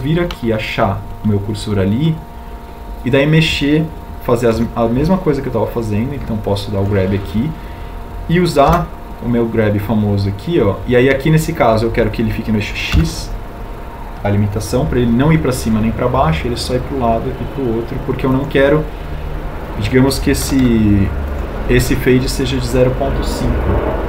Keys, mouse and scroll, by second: 4.7 a, 6.3 b, 9.4 g, 14.1 x.